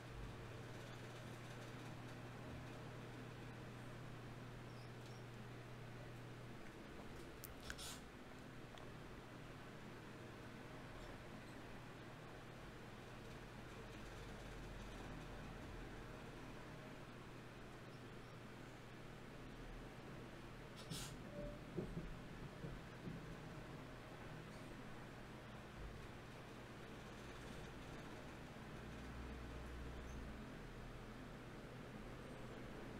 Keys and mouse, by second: 2.9 e, 4.1 g, 4.5-5.7 right drag, 6.3-9.3 drag, 7.7 right click, 9.1 right click, 9.3 g, 9.9-13.1 right drag, 10.7 g, 13.1 g, 13.5-21.2 drag, 13.5 right click, 17.9 g, 21.4 click, 22.2-24.0 right drag, 24.6 alt+m, 27.8 ctrl+Tab, 28.8-30.4 right drag, 30.4-32.9 typing.